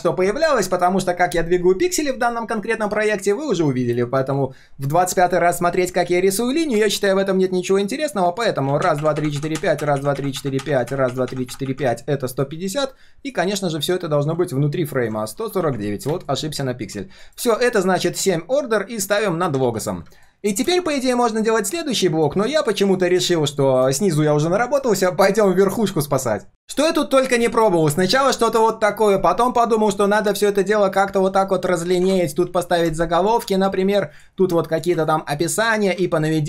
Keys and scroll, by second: 6.2 ctrl+shift+3, 8.3 ctrl+shift+3, 17.2 alt+l, 19.6 ctrl+s.